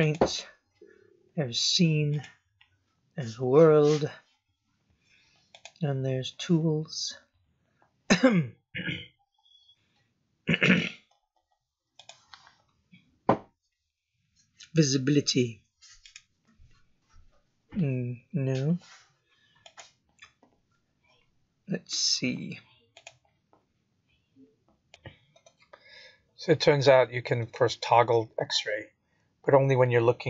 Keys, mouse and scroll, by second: 0.0 click, 2.1 click, 5.5 click, 11.9 click, 16.0 click, 17.3 scroll down 2, 19.6 click, 26.9 click, 27.9 click.